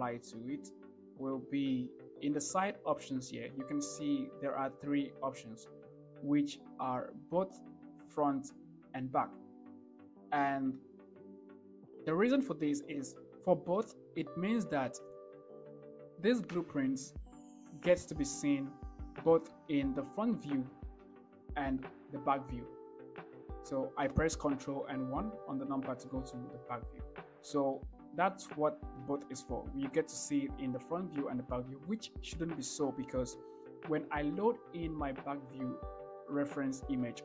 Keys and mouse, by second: 19.8-20.3 shift+middle drag, 21.4 ctrl+KP_1, 28.0-28.7 shift+middle drag.